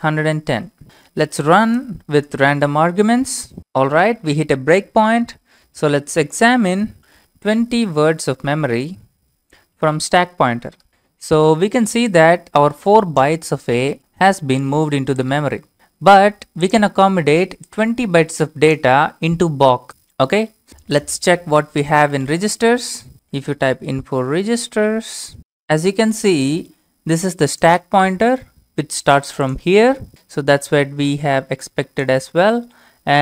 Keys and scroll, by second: 0.0-3.1 typing, 3.6 Return, 5.7-11.4 typing, 21.9-23.9 typing, 24.6 Tab.